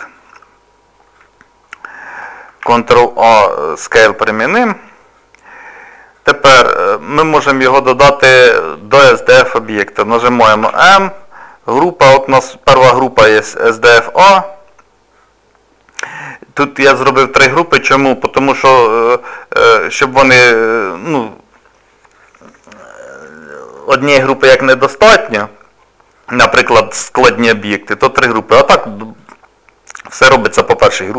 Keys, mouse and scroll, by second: 0.7-1.0 scroll down 2, 1.2 scroll up 2, 2.6 ctrl+a, 5.2 middle click, 10.6 m, 29.2 click.